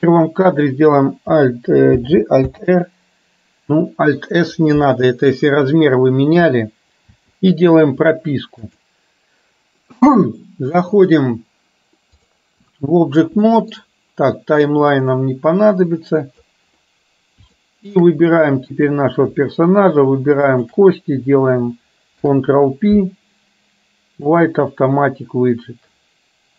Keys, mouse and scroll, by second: 8.8-12.4 drag, 13.5 shift+middle click, 15.2-16.5 drag, 17.7 shift+middle click, 18.8 click, 20.5 shift+click, 22.2 ctrl+p.